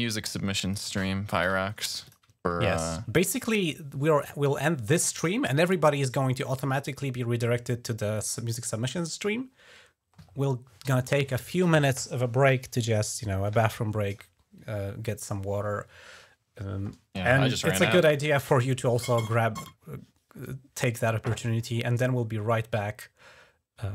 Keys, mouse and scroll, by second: 0.8 ctrl+scroll down 3, 1.5 scroll up 2, 1.9 click, 2.2-2.7 ctrl+scroll down 2.